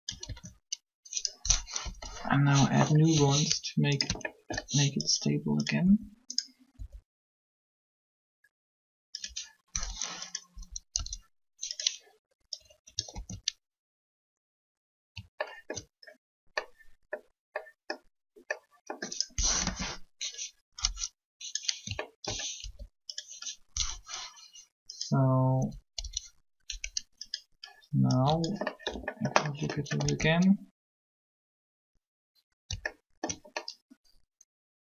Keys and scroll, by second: 0.2 alt+a, 1.8 Up, 3.1 r, 5.8 alt+shift+r, 6.7 r, 10.3 Up, 10.9 Up, 13.1 alt+a, 19.6 7, 25.6 Up, 26.0 Up, 29.8 alt+a.